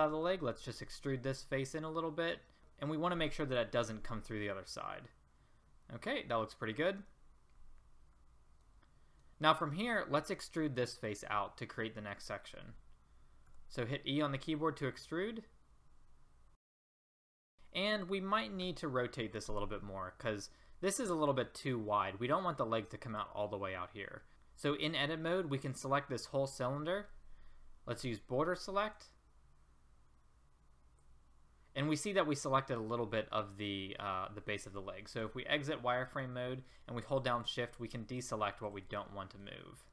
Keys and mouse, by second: 0.8 e, 4.0 middle click, 4.1 middle click, 4.5 middle click, 4.9 middle click, 5.1 middle click, 6.1 middle click, 6.7-8.1 middle drag, 8.2 middle click, 8.7 middle click, 11.0 middle click, 11.4 middle click, 13.5 e, 17.4 middle click, 18.6 z, 23.7 middle click, 27.9 b, 32.9 middle click, 33.6-35.2 middle drag, 35.2 z, 39.1-39.9 middle drag.